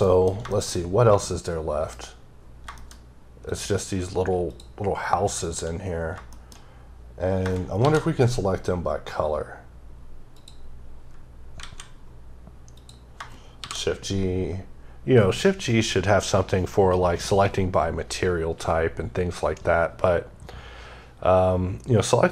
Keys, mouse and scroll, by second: 0.3 shift+middle click, 0.5-1.0 scroll down 1, 1.0 middle click, 1.8-3.3 scroll up 7, 2.6 shift+middle click, 3.3 click, 5.2 shift+double click, 5.7 scroll down 3, 6.1 shift+middle click, 6.7-7.2 scroll up 6, 7.6 shift+g, 10.2 click, 10.7-11.4 scroll down 5, 11.4 alt+a, 12.6 click, 13.4 g.